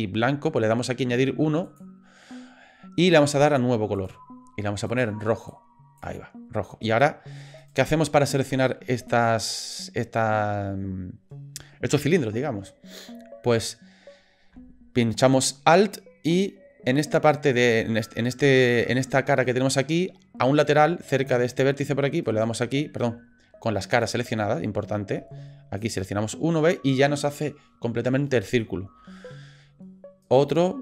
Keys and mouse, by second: 4.0 click, 4.9 click, 7.6 click, 22.3 alt+click, 23.9 click, 25.8 alt+click, 30.2 alt+click.